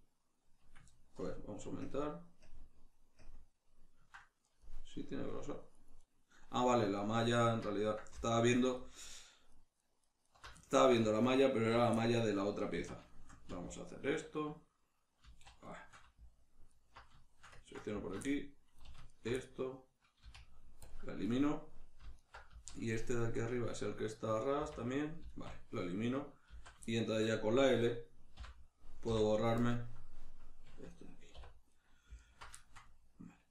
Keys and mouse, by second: 1.2 ctrl+KP_Add, 6.0 right click, 7.0 alt+right click, 8.3 alt+right click, 8.8 alt+right click, 9.2 alt+right click, 9.5 alt+right click, 9.8 alt+right click, 10.0 alt+right click, 10.2 alt+right click, 10.6 ctrl+middle click, 11.2 alt+right click, 12.0-13.9 middle drag, 12.8 z, 13.9 alt+right click, 15.2 z, 15.7-16.7 shift+middle drag, 16.7 alt+right click, 17.2-19.1 shift+middle drag, 19.1 alt+shift+right click, 19.4-22.1 middle drag, 20.2 x, 22.1 alt+right click, 22.5 z, 22.9-27.8 shift+middle drag, 24.5 x, 26.5 z, 27.8 right click, 28.3 l, 31.7 right click, 32.2 alt+right click, 32.6-33.5 shift+middle drag.